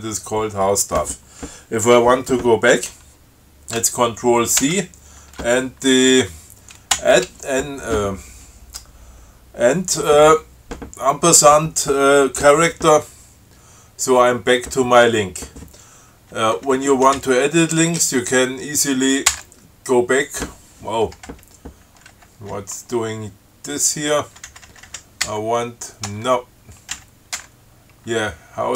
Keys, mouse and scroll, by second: 4.8 ctrl+c, 7.2 shift+6, 16.6 Right, 19.5 BackSpace, 21.5 Right, 22.4 Up, 22.7 Right, 25.5 BackSpace, 26.3 Return, 27.2 Left, 27.6 BackSpace.